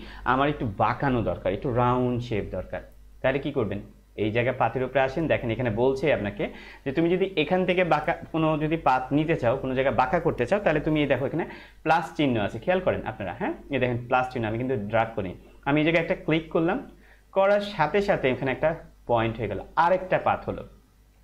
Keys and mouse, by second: 16.3 click.